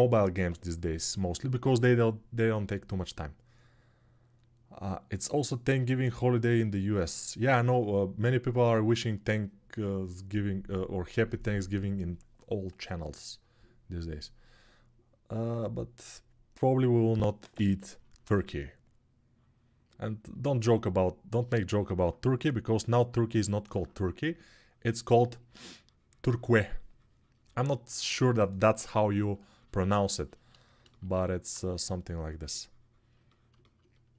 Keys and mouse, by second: 20.2 alt+middle click, 20.6 alt+middle click, 22.1 3, 24.2 click, 24.2 middle click, 25.2 click, 25.2 middle click, 30.8-34.1 alt+drag.